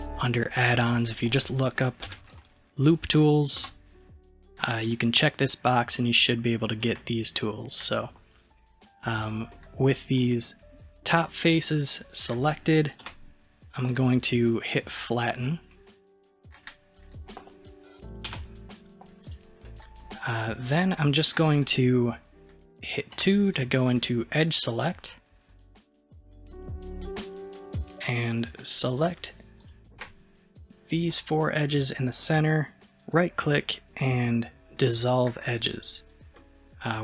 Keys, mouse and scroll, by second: 9.6-12.7 middle drag, 13.1 KP_1, 14.8 click, 15.5-18.3 middle drag, 18.3 n, 19.3 click, 19.7 middle click, 20.3-20.7 scroll up 2, 20.7-23.2 middle drag, 23.2 2, 25.5 click, 27.9 shift+click, 29.0 shift+click, 29.6 shift+click, 31.1-32.8 middle drag, 32.8-36.9 right drag, 36.9-37.0 scroll down 1.